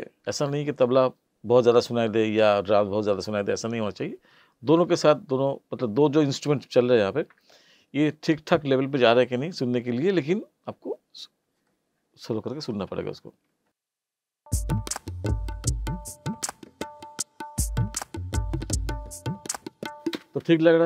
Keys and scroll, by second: 14.3 space, 20.1 space.